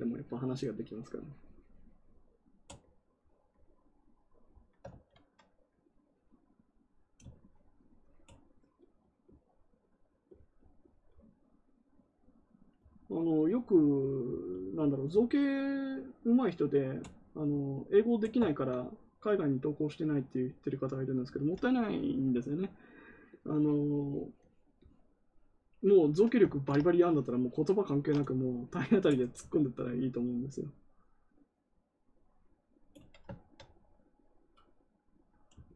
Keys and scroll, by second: 4.8 ctrl+z, 26.4 ctrl+z.